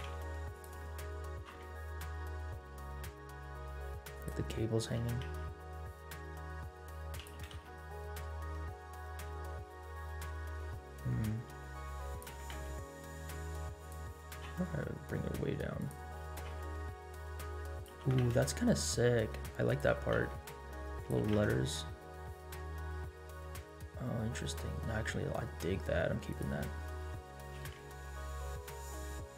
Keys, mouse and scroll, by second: 0.8-4.3 middle drag, 1.3 g, 4.6 middle click, 5.0 r, 7.3 g, 12.3 r, 14.2 g, 16.2 r, 17.9 g, 19.9 r, 21.1 g, 26.8 middle click, 27.5 g.